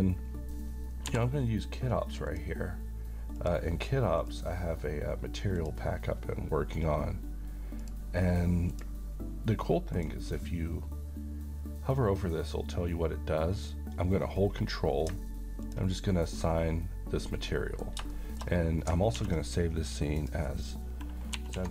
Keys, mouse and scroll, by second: 1.0 n, 2.2 click, 6.8 click, 8.4 click, 10.6 click, 15.6 ctrl+click, 17.4-18.1 middle click, 18.5-18.9 shift+scroll down 2, 19.3 s, 20.2 click, 21.4-21.7 typing.